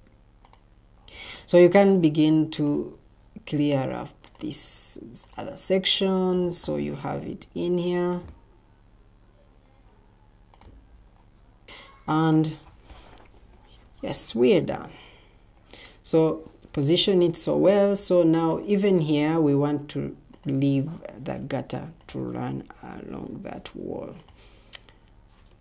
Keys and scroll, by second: 13.7 Escape, 15.0 Escape.